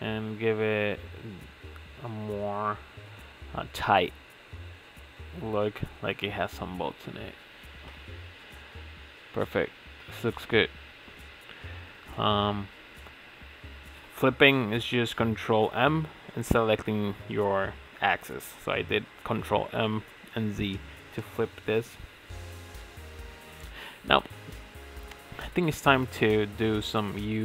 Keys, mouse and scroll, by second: 2.0 middle click, 2.7 ctrl+r, 6.0 middle click, 6.6 ctrl+r, 9.2-11.1 middle drag, 11.1 ctrl+r, 13.2 ctrl+z, 14.3 ctrl+shift+z, 15.4 ctrl+z, 15.8 ctrl+s, 16.2 ctrl+Tab, 16.4 middle click, 16.7 click, 16.8 shift+middle click, 16.9 Tab, 16.9 scroll down 1, 17.1 shift+middle click, 17.3 ctrl+s, 17.4 scroll up 2, 17.5 shift+middle click, 18.1-19.2 alt+shift+drag, 19.4 alt+shift+click, 20.4 ctrl+z, 20.7 middle click, 20.9-21.4 scroll down 3, 20.9 shift+middle click, 21.2 alt+shift+click, 21.4 middle click, 21.6 alt+shift+click, 21.8 middle click, 22.0 alt+shift+click, 22.3 middle click, 22.7 alt+shift+click, 23.2 alt+shift+click, 23.4 middle click, 23.7 ctrl+click, 24.0 ctrl+z, 24.2 shift+click, 24.6 middle click, 24.8 alt+shift+click, 25.6 ctrl+e, 26.0 scroll down 3, 26.0 Tab, 26.2 middle click, 26.3 Tab, 26.5 Tab, 26.6 middle click, 26.9 ctrl+s, 27.0 scroll down 3, 27.2-27.4 shift+middle drag.